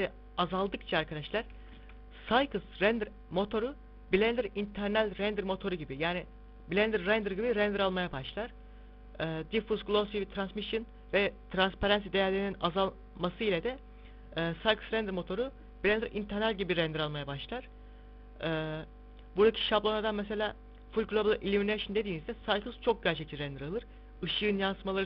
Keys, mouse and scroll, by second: 6.0 click, 18.8 click.